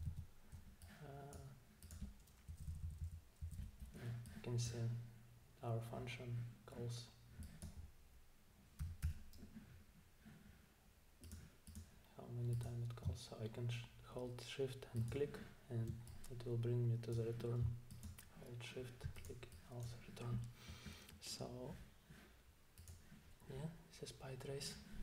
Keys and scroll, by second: 0.1 super+`, 2.5 Down, 2.7 Down, 2.8 Down, 3.0 Down, 3.4 Down, 8.8 typing.